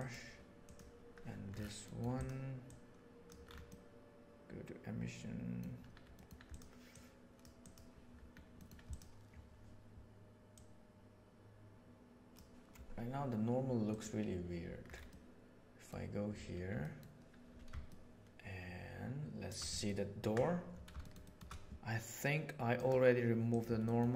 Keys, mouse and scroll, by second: 0.6 right click, 1.8 middle click, 2.6 click, 3.7-5.6 middle drag, 6.8 click, 7.6 click, 8.5 middle click, 8.8 click, 10.4-12.3 drag, 15.1 middle click, 16.8 middle click, 17.8-18.2 shift+middle drag, 18.4 shift+middle click, 18.6 shift+middle click, 19.8-20.1 ctrl+middle drag, 21.0-21.4 shift+middle drag, 22.6 click, 23.4 click, 23.8 middle click.